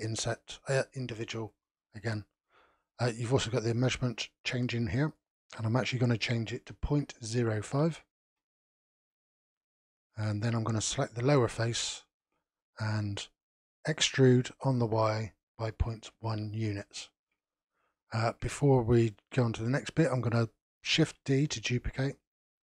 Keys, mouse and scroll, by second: 0.2 click, 0.7 click, 1.0 click, 1.4 click, 1.9 click, 3.3-8.5 drag, 9.7-10.8 middle drag, 10.8 click, 11.6-14.0 shift+middle drag, 14.0 e, 20.9 shift+d.